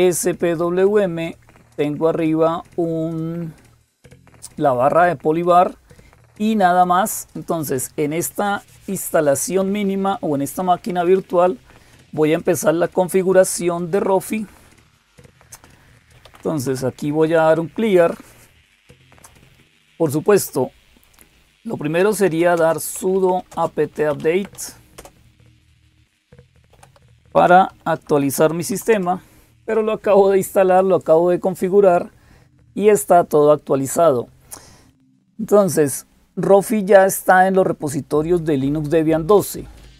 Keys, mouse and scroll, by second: 0.0-39.9 typing, 0.2 click, 6.0 click, 7.1 click, 36.9 click.